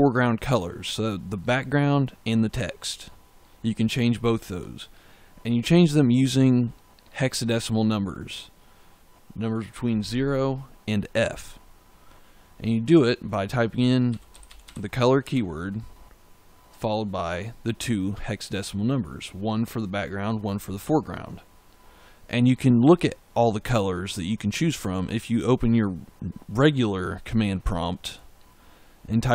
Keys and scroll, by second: 13.4-15.1 typing.